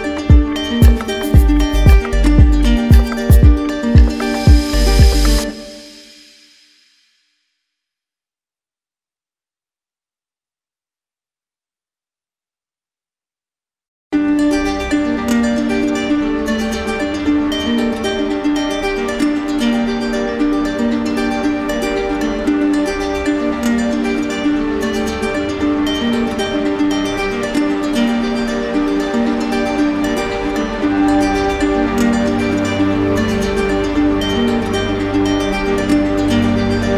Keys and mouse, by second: 1.4 alt+click, 2.8 right click, 5.4 right click, 5.8 right click, 6.9 right click, 7.8 ctrl+click, 10.0 ctrl+click, 11.3-12.5 right drag, 14.1 shift+click, 17.9 shift+click, 19.2 shift+click, 20.1 shift+click, 20.7 shift+click, 21.2 shift+click, 21.8 shift+click, 22.2 shift+click, 22.6 shift+click, 23.1 shift+click, 23.6 shift+click, 23.8 shift+click, 24.1 shift+click, 24.4 shift+click, 25.0 shift+click, 25.5 shift+click, 25.8 shift+click, 26.2 shift+click, 26.5 shift+click, 26.9 shift+click, 27.2 shift+click, 27.5 shift+click, 27.7 shift+click, 29.6 shift+click, 29.9 ctrl+z, 30.1 ctrl+z, 30.3 ctrl+z, 30.7 ctrl+z, 31.0 ctrl+z, 31.3 ctrl+z, 31.7 ctrl+z, 31.9 ctrl+z, 32.3 ctrl+z, 32.5 ctrl+z, 33.5 ctrl+z, 33.7 ctrl+z, 35.3-36.7 shift+drag.